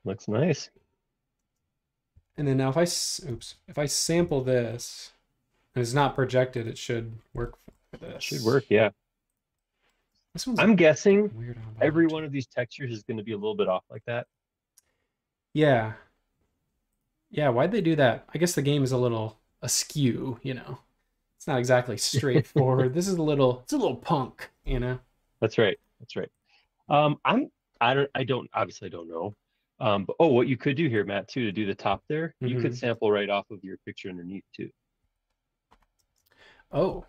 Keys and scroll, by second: 1.4 space, 2.1 b, 3.4 super+z, 4.0 b, 10.1 space, 12.8 Escape, 13.0 Escape, 31.9 Page_Down, 35.0 Escape, 36.0 space.